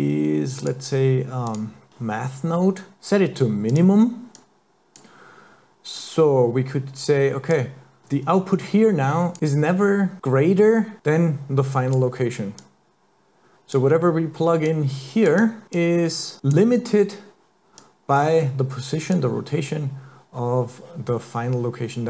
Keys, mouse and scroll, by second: 1.9 click, 4.4 click, 6.0 click, 8.0 click, 10.2 click, 11.0 click, 12.6 click, 14.7 click, 15.4 click, 15.8 click, 17.9 click.